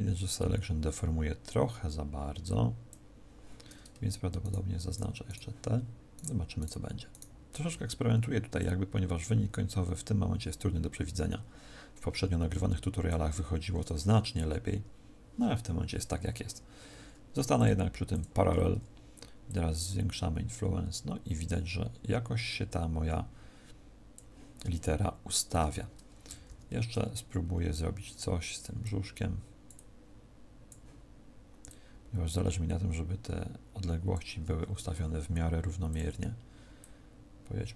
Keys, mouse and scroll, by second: 4.3 shift+right click, 4.8 shift+right click, 8.5 click, 17.5 click, 19.3 click, 35.8 click, 36.7 click.